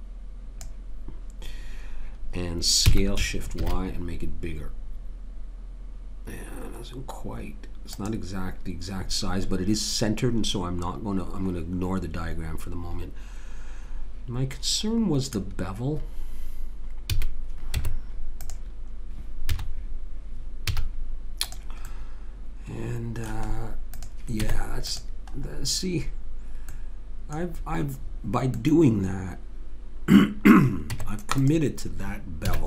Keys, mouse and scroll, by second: 2.9 s, 17.1 a, 17.8 Tab, 19.6 z, 20.7 z, 23.6 middle click, 24.0 click, 24.4 Tab, 29.0-30.3 middle drag, 30.9 Tab, 32.5 a.